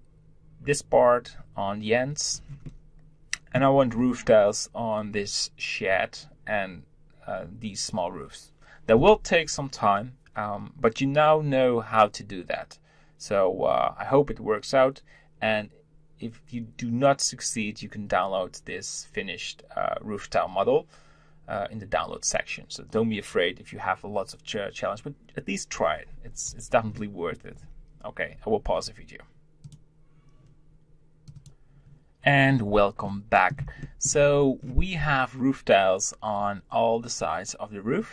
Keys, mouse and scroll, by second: 2.3 scroll down 3, 2.7-3.8 middle drag, 3.8-6.9 scroll up 2, 32.9-34.2 middle drag, 34.2 scroll up 2.